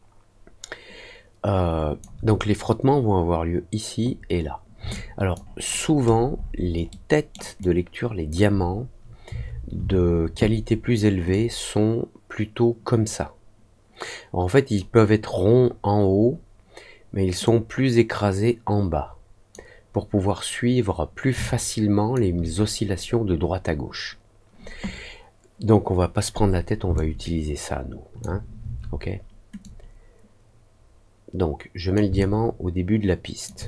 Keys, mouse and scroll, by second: 4.9 alt+click, 5.7-6.5 alt+scroll up 3, 6.8 alt+middle click, 7.5 alt+click, 11.2-14.7 drag, 17.4-19.4 drag, 21.4 alt+click, 26.9-28.1 alt+drag, 29.6-31.9 drag, 32.1-33.4 alt+drag.